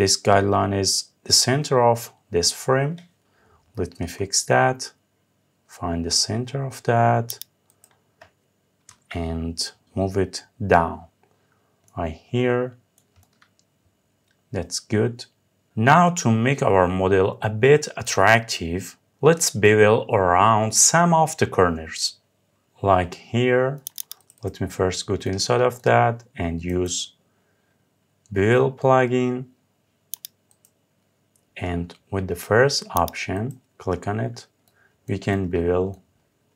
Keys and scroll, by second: 8.5 Up.